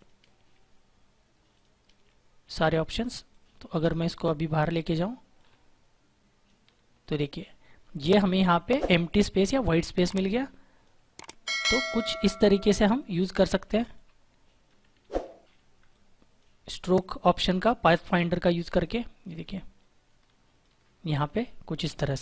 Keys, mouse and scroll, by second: 4.5 ctrl+-, 5.3 click, 6.9 click, 10.2 click, 11.4 shift+click, 12.8 shift+click, 15.2 ctrl+z, 15.8 click, 16.9 shift+click, 21.0 click.